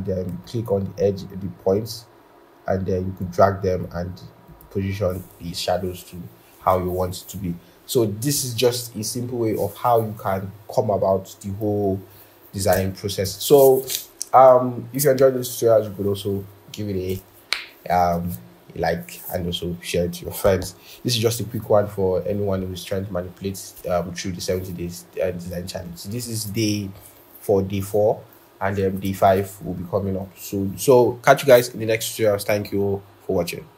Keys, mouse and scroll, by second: 0.7 typing, 7.8-8.3 scroll.